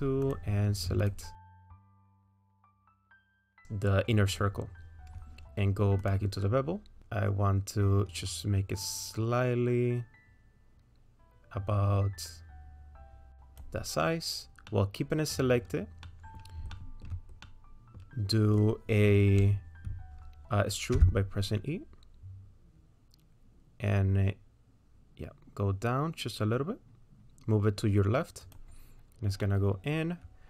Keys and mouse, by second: 0.3 click, 1.0 ctrl+click, 2.2 ctrl+click, 7.1-13.6 drag, 14.7 middle click, 16.1 middle click, 16.7 shift+middle click, 17.4 middle click, 20.9 e, 29.5 middle click.